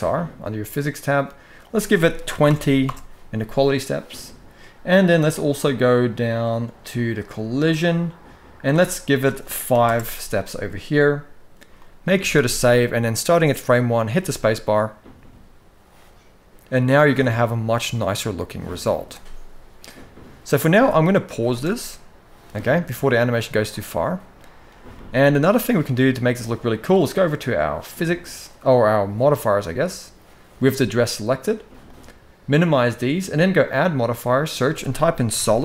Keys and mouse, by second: 1.4-2.6 drag, 8.4-9.6 drag, 11.5 middle drag, 11.9 ctrl+s, 12.1 ctrl+s, 13.0 middle click, 13.9 space, 21.8 space, 22.3-23.0 middle drag, 23.4-24.3 middle drag, 24.7 shift+middle drag, 25.1-25.6 middle drag, 27.7 click, 31.6 click, 32.3 click, 33.5-35.6 drag.